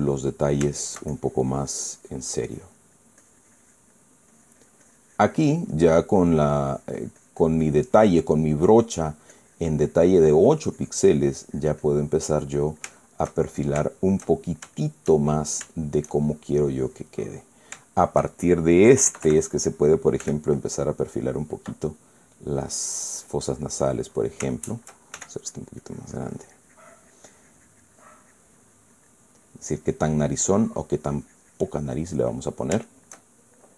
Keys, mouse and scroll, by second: 0.2-1.4 drag, 1.0 middle click, 1.5 shift+middle click, 2.2-3.9 drag, 3.9-6.9 drag, 9.2 middle click, 10.0-12.9 drag, 12.9-15.9 middle drag, 16.0 shift+middle click, 17.5 click, 18.0 click, 18.6 shift+click, 19.8 KP_Add, 20.9 f, 21.6 click, 22.9 middle click, 23.9 click, 25.2 shift+middle click, 25.9 shift+f, 26.2 shift+click, 26.5-30.2 shift+drag, 26.5 shift+f, 30.5-33.2 drag, 33.5 shift+middle click.